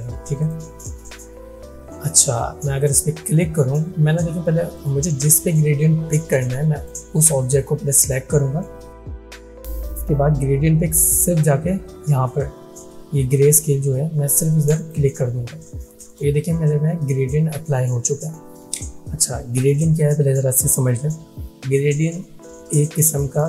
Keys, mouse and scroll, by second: 0.5 click, 0.5 click, 4.8-8.1 drag, 14.8 click.